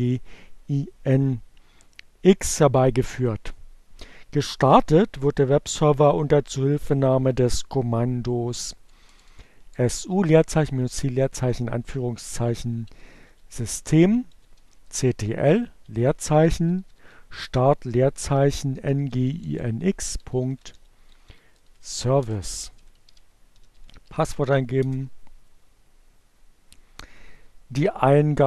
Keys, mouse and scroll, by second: 6.3 BackSpace, 11.2-20.3 typing, 20.4 shift+Return, 21.4-22.5 typing, 24.2 l, 24.2 Return, 28.2 click.